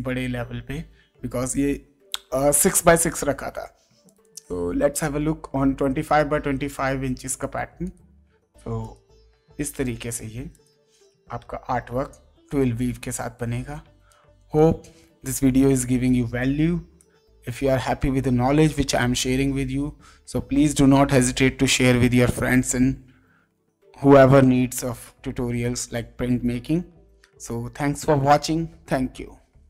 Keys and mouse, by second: 2.7 click, 4.0 click, 6.0 click, 7.4 click, 11.4 space, 12.1 click, 12.9 click, 14.0 click, 16.6 space, 16.9 click, 17.8 ctrl+space.